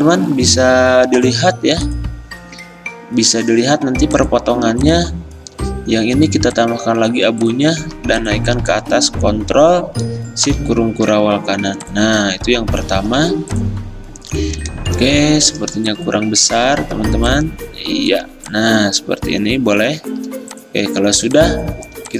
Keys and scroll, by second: 17.2 v, 20.8 v.